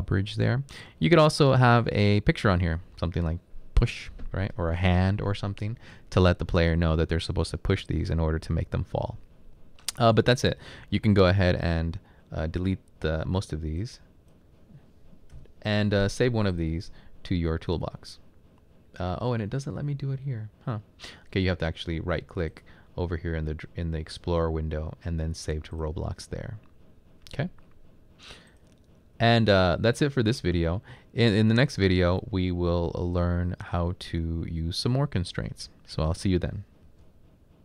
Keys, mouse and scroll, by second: 10.8-11.5 typing, 15.3 Delete, 15.5 typing.